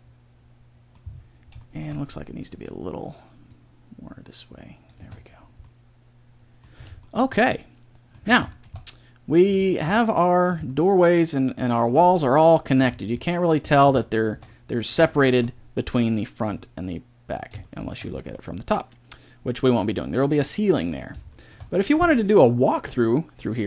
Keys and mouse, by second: 3.4 middle click, 4.2-5.2 drag, 4.9 a, 5.2-7.1 middle drag, 7.2 middle click, 7.5 middle click, 8.5 middle click, 12.2 middle click, 13.1-16.5 middle drag, 18.7-23.6 middle drag.